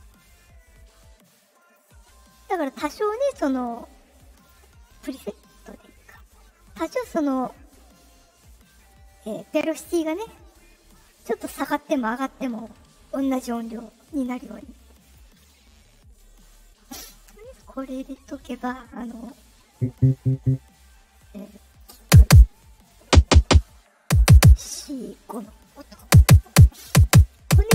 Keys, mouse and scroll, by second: 1.5 click, 4.3 click, 15.0 click, 17.8-18.4 drag, 21.6 click.